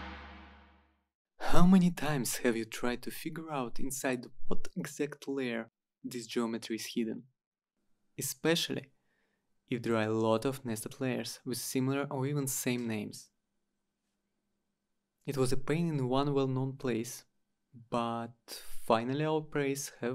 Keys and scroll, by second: 3.3-4.4 typing, 5.6-8.2 typing, 13.1 Return, 17.3 Return, 19.1 Return.